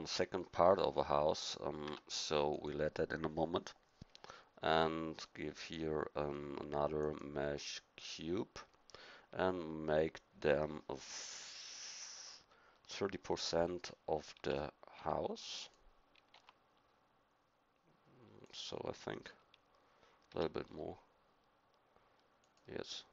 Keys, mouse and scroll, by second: 1.8 Tab, 14.3 s, 16.3 g, 20.3 s.